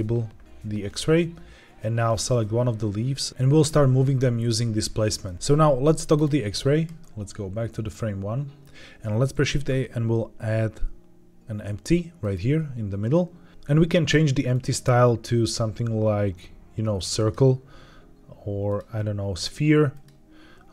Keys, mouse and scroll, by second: 2.0 click, 3.3 shift+middle click, 3.3-4.0 scroll up 1, 5.1 click, 5.3 space, 6.0 click, 6.9-8.5 drag, 9.2 shift+a, 14.4-17.2 drag, 18.6-20.0 drag.